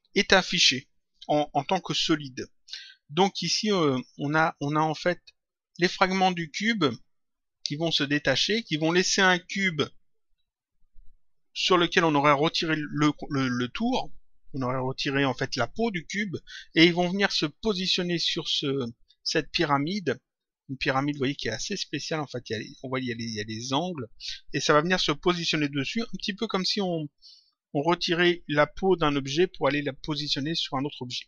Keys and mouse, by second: 4.8 click, 20.9 click.